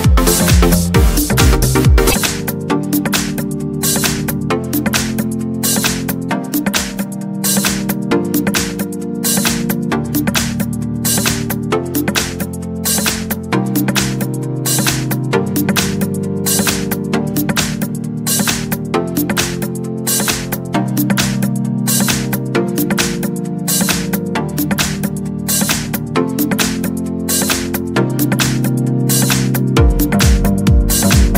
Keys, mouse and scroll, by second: 2.2 click, 2.7 click, 5.7 click, 7.4 click, 8.5 click, 11.2 click, 12.2 click, 13.1 click, 14.0 click, 15.0 click, 16.6 click, 19.9 1, 20.5 2, 23.0 click, 24.9 9, 25.2 0, 26.7-29.6 drag.